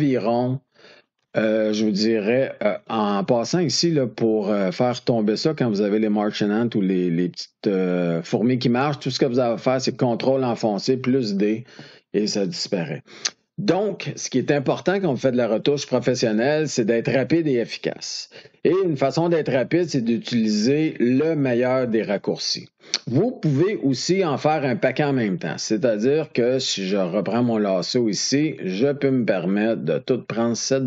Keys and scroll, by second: 10.8 ctrl+d.